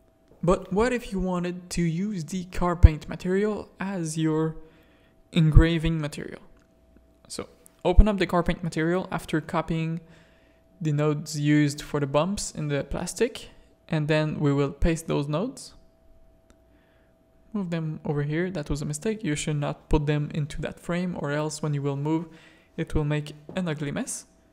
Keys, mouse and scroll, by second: 2.6-4.3 drag, 4.7-5.2 middle drag, 5.3 shift+middle click, 6.3 middle click, 8.6 click, 9.3 click, 10.7 click, 11.2 click, 11.8 Tab, 12.8 click, 14.6 ctrl+v, 15.0 click, 15.8 g, 16.9 click, 18.3-20.1 drag, 20.1 middle click, 21.8 middle click, 23.2 g.